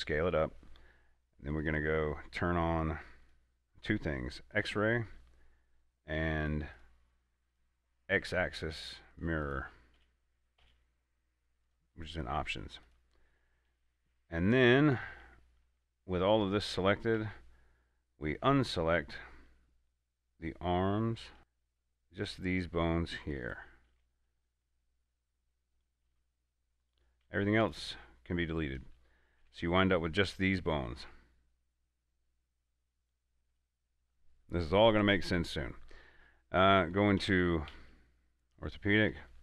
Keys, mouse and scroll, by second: 0.6 click, 10.3 Tab, 12.0 click, 14.4 shift+middle click, 15.0-15.4 scroll up 2, 16.3-16.7 scroll down 1, 16.7-17.5 typing, 19.9-21.4 middle drag, 21.4 ctrl+z, 21.6 c, 22.1-23.7 middle drag, 23.7 right click, 24.2 c, 24.9 middle click, 26.0 right click, 26.4 c, 26.8 middle click, 27.1 right click, 27.5 x, 27.9 click, 29.1 a, 29.7 Tab, 30.8-36.3 middle drag, 39.1 middle click, 39.2 scroll up 1.